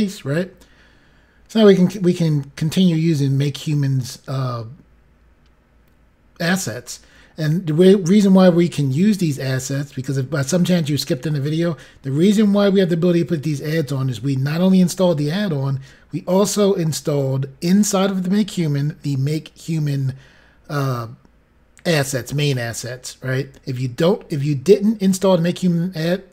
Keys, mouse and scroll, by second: 1.2-2.1 scroll down 2, 2.1 scroll down 1, 3.1-3.8 scroll down 4, 4.5 scroll down 1.